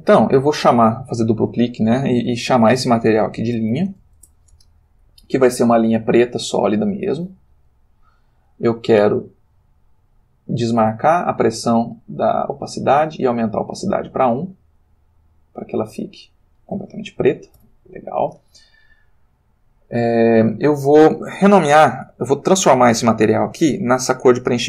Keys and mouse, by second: 0.0 click, 3.3-4.0 typing, 7.2 click, 10.4 click, 12.7 click, 14.2 click, 17.6 x, 18.1 click, 20.1 click.